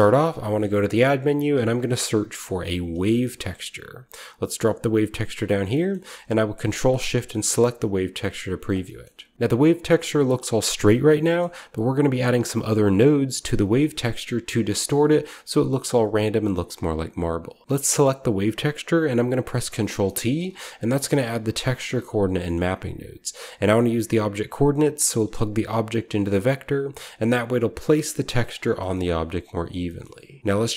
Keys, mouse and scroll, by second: 0.5 shift+a, 1.0 click, 1.4-2.5 shift+drag, 1.4 w, 1.7 a, 2.4 v, 4.4-5.9 drag, 9.1 shift+scroll up 1, 9.3-10.0 scroll down 1, 9.4 middle click, 11.2-13.5 scroll up 1, 11.3-13.5 middle drag, 13.5 click, 16.4-17.6 middle drag, 16.7 click, 19.5 ctrl+t, 19.9-22.0 ctrl+middle drag, 20.1-22.0 ctrl+scroll up 1, 20.3-22.0 typing, 20.5-22.0 ctrl+drag, 28.4 Tab, 28.5-30.4 scroll down 1, 29.5 x, 30.4-30.7 scroll up 1.